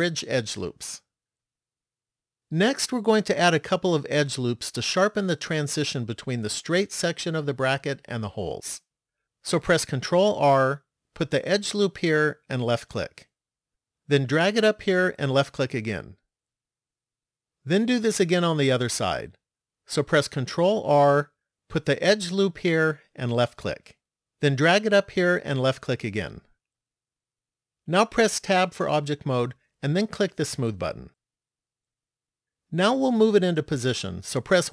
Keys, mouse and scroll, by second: 4.1 middle click, 10.5 ctrl+r, 20.6 ctrl+r, 28.7 Tab, 31.1 click.